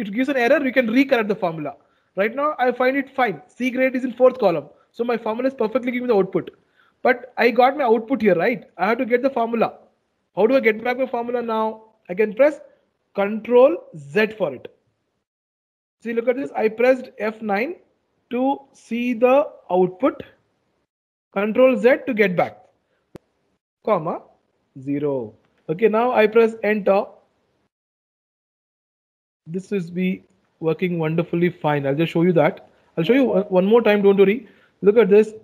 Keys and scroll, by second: 13.6 ctrl+z, 17.5 F9, 21.5 ctrl+z.